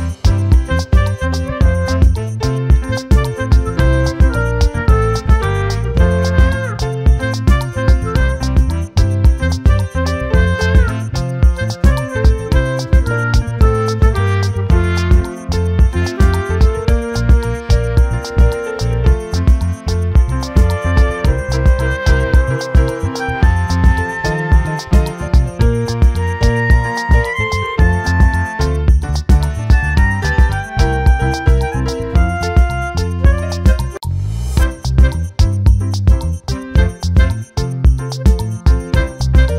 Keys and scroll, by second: 19.0 ctrl+t.